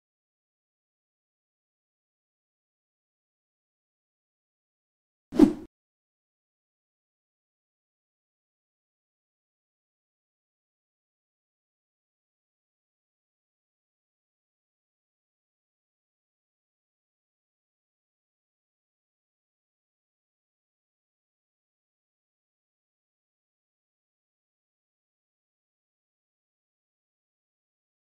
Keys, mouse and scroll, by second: 0.0-0.4 typing, 0.5-5.3 drag, 5.5 scroll up 1, 10.8 scroll up 1, 12.4-27.6 ctrl+drag, 27.6 ctrl+t.